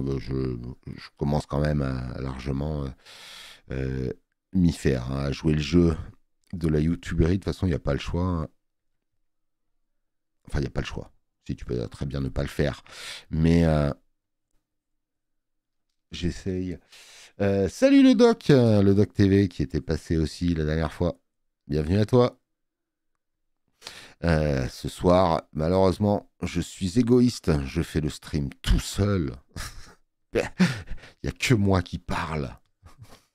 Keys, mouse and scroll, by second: 32.6 click.